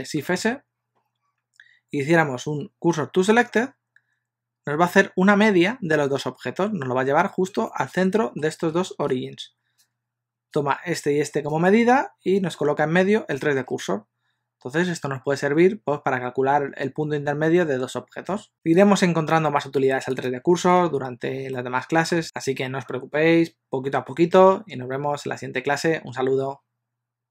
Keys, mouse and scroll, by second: 0.5 shift+s, 7.7 middle click, 18.5 click, 18.5 x, 20.2 click, 20.9 alt+g, 21.6 middle click.